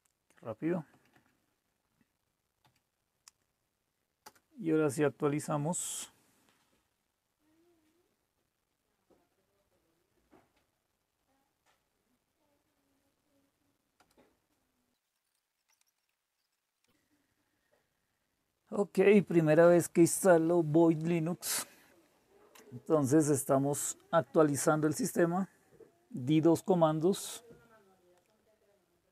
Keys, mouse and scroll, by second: 0.9 Up, 1.1 Up, 2.6 Up, 4.2 Return, 14.0 Return.